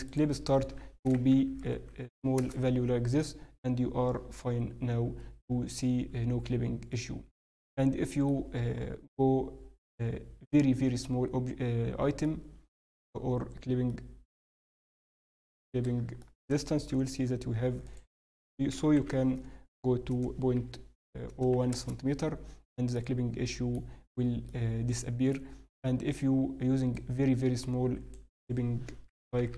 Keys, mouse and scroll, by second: 1.4 0, 1.6 0, 1.9 0, 5.7 n, 6.1 scroll down 1, 6.9 middle click, 6.9-8.5 scroll down 4, 8.5-9.3 scroll up 1, 12.2 middle click, 16.2 middle click, 16.9 n, 17.8 click, 22.9 middle click, 23.9-24.4 scroll up 1, 24.4 middle click, 26.9 click, 29.5 0.